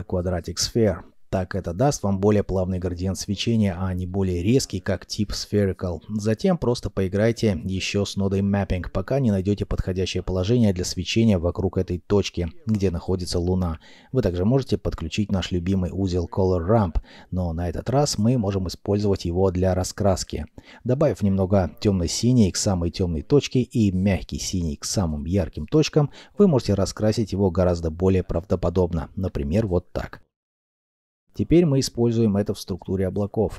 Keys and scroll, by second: 7.4 ., 7.6 Return, 7.6 3, 12.2 ., 12.2 2, 12.5 5, 12.7 Return, 17.1 r, 17.8 m, 18.0 p, 28.6 alt+F9.